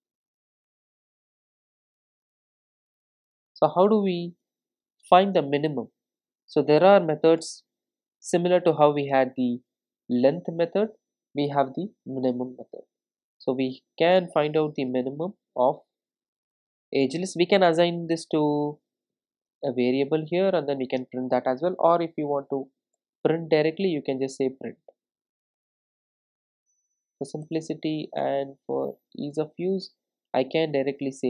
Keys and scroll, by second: 2.5 alt+super+l, 7.4 Return, 14.2 Return, 23.8 Return.